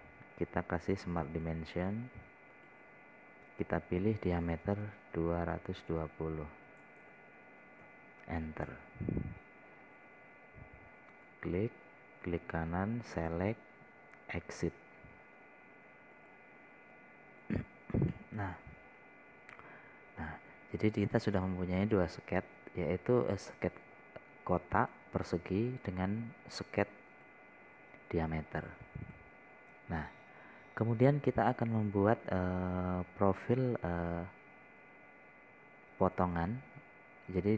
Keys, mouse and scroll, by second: 2.7 click, 6.6 KP_2, 7.3 KP_1, 7.5 KP_0, 8.3 BackSpace, 9.3 KP_0, 11.2 scroll up 1, 12.7 click, 13.7 right click, 15.0 click, 19.6-21.8 middle drag, 22.3 click, 23.0-23.4 scroll down 1, 26.2 click, 32.5-32.8 scroll down 1.